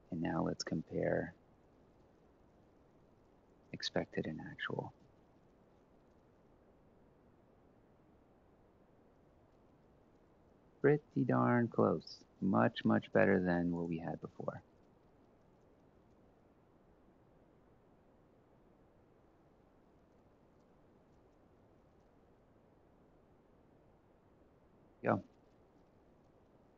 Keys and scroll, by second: 4.7 h, 12.7 ctrl+x, 13.6 ctrl+v, 16.7-23.5 typing.